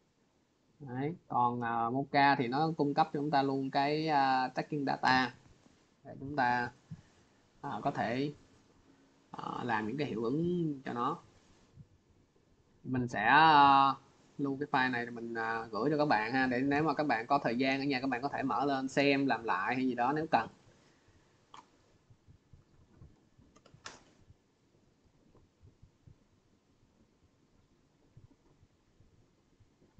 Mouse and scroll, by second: 0.7 click, 1.8 click, 3.7 click, 5.0 click, 6.7 click, 8.6 click, 10.9 click, 13.0 click, 14.0 click, 16.4 click, 17.6 click, 26.0 click, 27.9 click, 29.7 click.